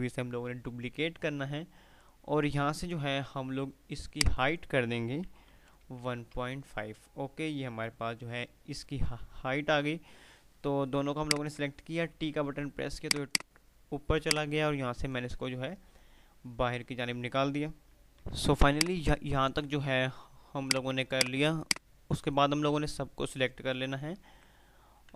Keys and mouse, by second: 8.4 F5, 11.0 shift+click, 12.4 t, 12.9-15.9 drag, 15.9 F3, 18.1 click, 18.6 F2, 18.9-19.6 F2, 18.9 click, 20.7-22.7 drag, 24.3-25.1 typing.